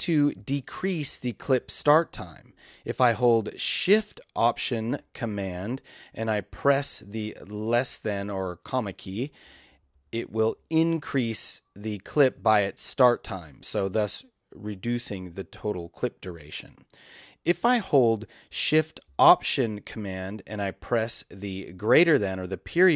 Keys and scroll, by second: 9.1 alt+shift+super+,, 22.7 alt+shift+super+..